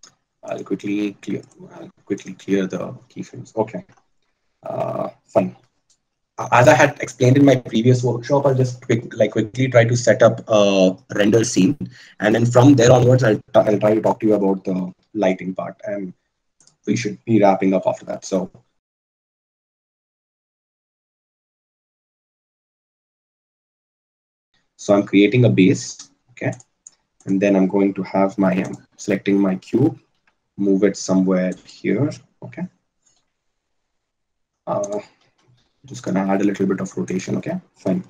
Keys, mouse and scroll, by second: 15.8 shift+a, 19.5 s, 25.5 s, 29.3-31.9 drag, 30.8 g, 33.6 r, 35.7 r.